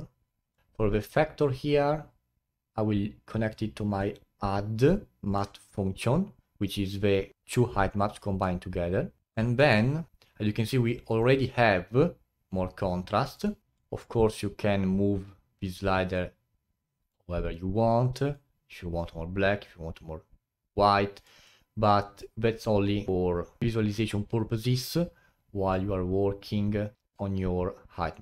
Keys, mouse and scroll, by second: 0.6-0.9 scroll up 1, 1.4 click, 4.0 click, 5.2-7.3 middle drag, 7.3-8.4 scroll up 8, 8.4 middle click, 9.2 click, 9.5 middle click, 9.9-10.7 scroll up 3, 13.3 click, 13.7-22.2 drag, 24.1 click, 25.7-28.2 drag.